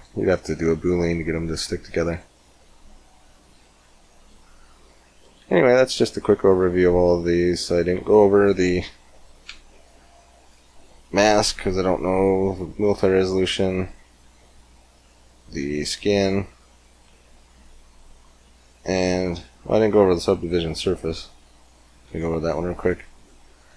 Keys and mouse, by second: 1.9 click, 2.1 g, 4.7-9.4 drag, 21.5-23.7 right drag, 21.9 x, 22.9 click, 23.3-23.7 drag, 23.6 x.